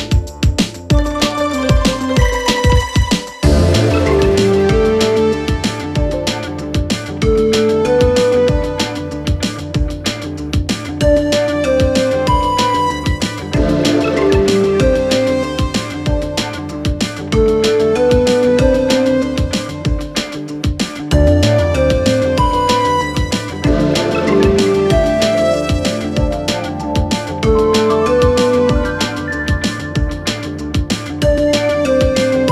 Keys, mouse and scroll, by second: 4.4 Caps_Lock, 5.7 click, 9.0-11.1 typing, 12.3 click, 17.9 click, 23.8 click, 25.7 click, 27.5-30.9 drag.